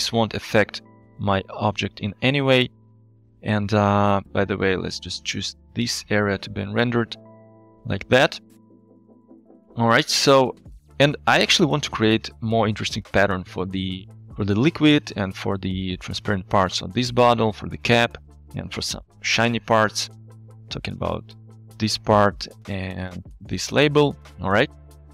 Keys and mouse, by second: 2.1-2.9 middle drag, 4.3 ctrl+b, 9.0 alt+shift+z, 20.9 click, 21.4 click, 22.7 alt+shift+z, 23.4 click, 24.5 alt+shift+z.